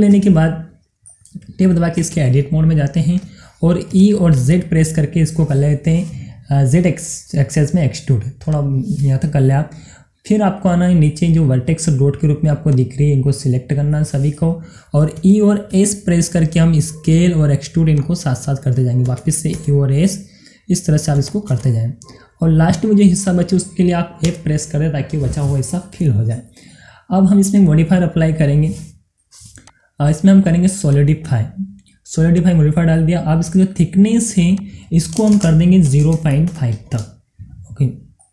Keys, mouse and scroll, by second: 2.5 Tab, 3.3 scroll up 1, 4.4 e, 4.9 z, 8.5 click, 9.0 scroll down 1, 10.8-12.7 middle drag, 12.7-14.4 drag, 14.4 middle click, 15.7 e, 16.2 s, 18.0 click, 19.6 e, 20.1 s, 21.2 click, 21.6 e, 22.0 s, 23.2 click, 24.7 f, 26.3 middle click, 27.2 scroll down 1, 29.7 click, 34.6 click.